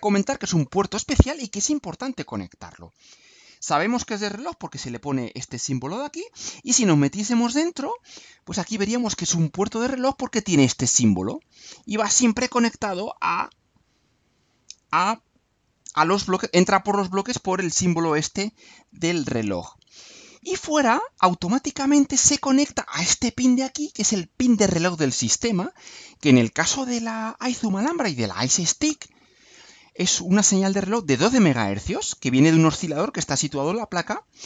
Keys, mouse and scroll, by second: 7.1 click, 19.5 click.